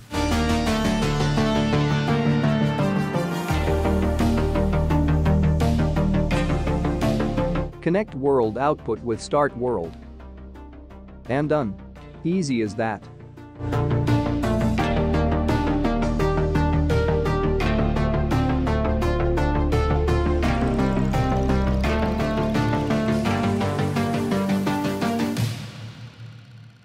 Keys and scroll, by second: 5.9 space.